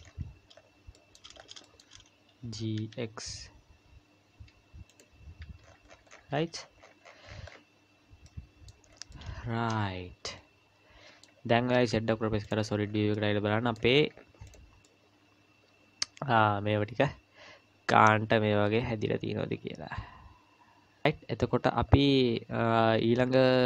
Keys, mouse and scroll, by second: 0.0-1.6 scroll up 12, 1.0 shift+middle click, 1.6 shift+middle click, 2.4 g, 5.4 Tab, 5.6-8.1 scroll down 46, 8.1 scroll down 2, 8.3 middle click, 8.9-10.2 scroll down 2, 9.1 middle click, 11.7 z, 12.8 scroll down 3, 13.1 middle click, 13.9-14.5 scroll up 1, 14.5 click, 14.5 scroll up 3, 14.8 middle click, 21.6-22.9 scroll down 3, 22.9-23.6 scroll up 1.